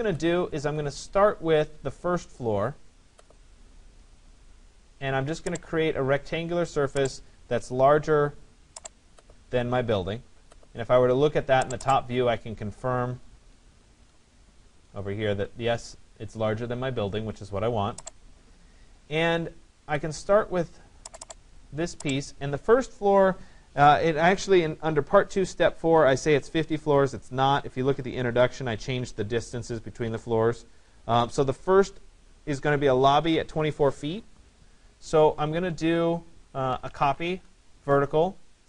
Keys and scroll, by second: 0.2 Escape, 37.2 Return.